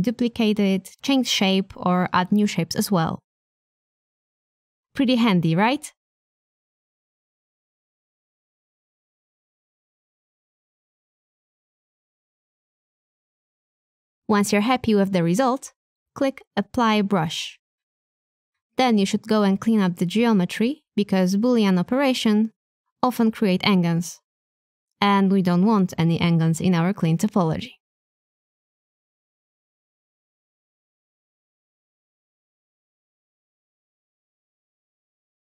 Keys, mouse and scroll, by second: 0.0 Tab, 1.1 middle click, 4.0 shift+d, 6.0-7.5 middle drag, 8.4 click, 9.1-10.2 middle drag, 10.6 o, 11.5 shift+middle click, 11.6 click, 12.0 middle click, 13.2 r, 15.6 Tab, 15.6 x, 16.8 Tab, 19.3 click, 21.7 click, 22.8 middle click, 24.2 click, 24.6 Tab, 25.7 1, 26.2 a, 26.3 a, 27.4 shift+click, 27.6 shift+middle click, 31.8 3, 35.4 Tab.